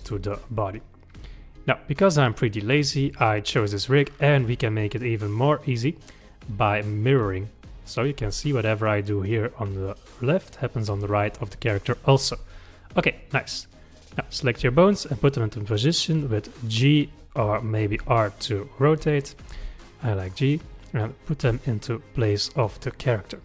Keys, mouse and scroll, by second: 0.3-0.6 scroll up 3, 5.5 click, 7.0 click, 8.0 click, 8.2 g, 13.1 click, 14.6 g, 17.7 click, 18.0 r, 19.3 click, 19.6 g, 21.1 click, 21.5 g, 23.1 click.